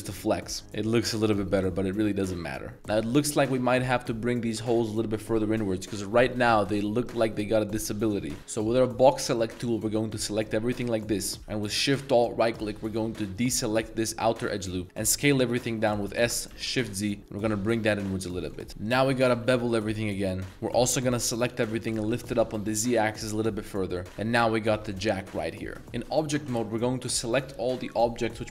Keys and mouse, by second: 1.9 Tab, 2.0-2.4 drag, 3.0 middle drag, 3.5-4.4 middle drag, 4.4 Tab, 5.7 middle click, 6.5-7.0 middle drag, 7.0 click, 8.7 b, 11.2 middle click, 11.4 shift+z, 13.4 alt+shift+right click, 14.5-14.8 middle drag, 14.8 shift+z, 16.1 s, 16.5 shift+z, 18.4 click, 18.6 Tab, 18.7 alt+2, 18.8 alt+right click, 19.4 ctrl+b, 20.5-22.1 typing, 24.0 a, 24.2 b, 25.0 drag, 25.2-28.5 middle drag.